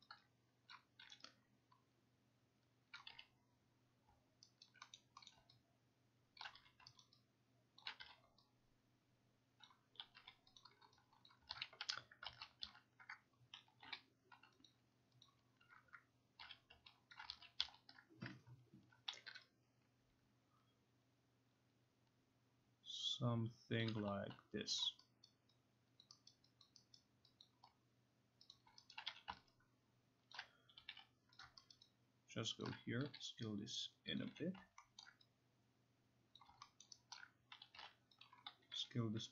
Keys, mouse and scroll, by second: 0.2-1.0 typing, 0.7 click, 3.0 click, 3.1 q, 4.7 alt+right click, 5.0 middle click, 5.3 middle click, 6.5 click, 6.6 q, 7.1 alt+right click, 7.8 alt+right click, 8.0 q, 9.7 click, 10.0 u, 10.6 click, 11.3 click, 11.5 ctrl+z, 11.9 Tab, 12.3 ctrl+z, 12.7 ctrl+z, 13.5-14.4 typing, 14.7 click, 15.3 click, 16.4 q, 17.1 alt+click, 17.3 ctrl+z, 17.6 ctrl+z, 19.3 t, 23.8 click, 24.8 click, 25.3 alt+right click, 26.0 alt+click, 28.5 click, 28.9 alt+right click, 29.1 q, 30.3 alt+click, 30.5-31.5 typing, 31.4 click, 31.7 alt+right click, 32.7 alt+click, 33.1 t, 34.2 click, 34.3 q, 35.0 alt+middle click, 36.4 click, 36.8 alt+middle click, 37.2 alt+right click, 37.6-38.8 typing, 38.3 click.